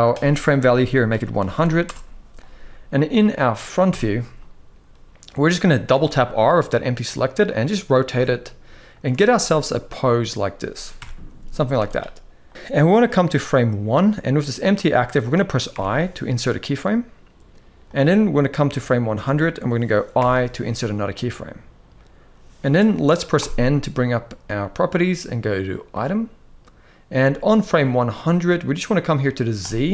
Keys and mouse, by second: 1.2 0, 3.5 KP_1, 5.6 r, 7.8 r, 10.7 KP_0, 11.3 z, 12.6-13.6 drag, 15.4 i, 17.5-18.8 drag, 19.8 i, 23.0 n, 25.6 click, 29.3-29.9 drag.